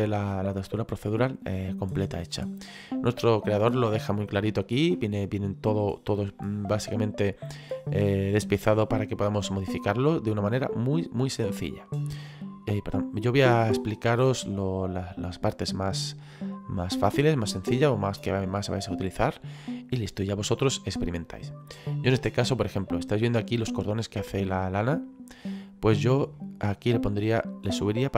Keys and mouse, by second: 0.1 middle click, 3.7 middle click, 5.7 middle click, 14.9 middle click, 18.8 middle click, 21.7 middle click, 26.3 middle click, 27.6 click.